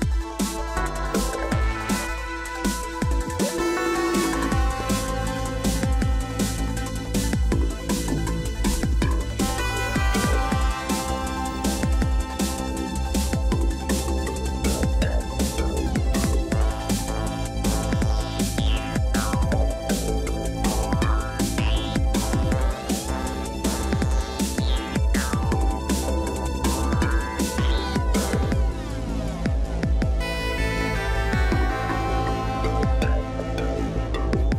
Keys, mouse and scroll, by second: 17.8 right click, 26.5 right click, 28.7 ctrl+t.